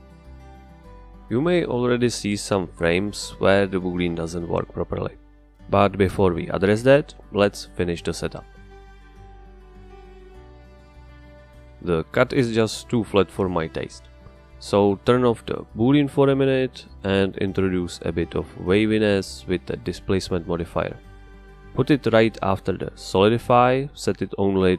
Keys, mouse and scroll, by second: 0.8 right click, 3.9 click, 5.5 middle click, 8.2 middle click, 16.2 click, 17.2 click, 18.9 space, 19.3 click, 20.0 click, 20.5-22.0 drag, 22.8 click, 24.2-24.7 drag.